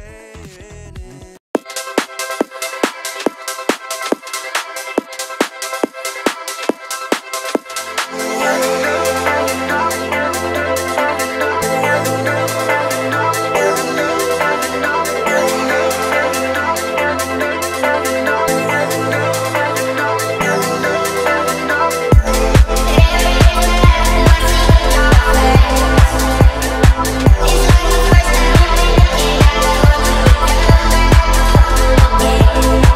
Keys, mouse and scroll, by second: 0.2 KP_2, 2.6 BackSpace, 3.3 KP_1, 3.6 KP_5, 4.4 click, 5.9 e, 6.2 s, 9.3 KP_Decimal, 10.1 KP_8, 11.4 KP_2, 12.7 click, 14.4 middle click, 15.7 click, 16.6 alt+click, 17.8 e, 19.7 KP_Decimal, 19.9 KP_3, 21.3 BackSpace, 21.7 KP_5, 22.3 click, 23.7 Tab, 24.3 Tab, 24.9 Tab, 25.5 Tab, 26.9 click, 27.8 alt+click, 28.8 alt+click, 30.5 ctrl+b, 31.8-32.2 scroll up 2.